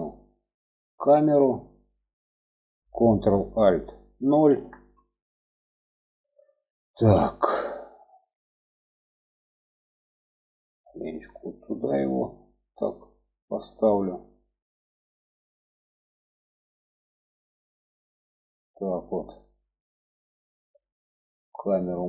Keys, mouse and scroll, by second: 0.1-2.4 drag, 4.7 ctrl+alt+KP_0, 10.5 g, 21.4-22.0 drag.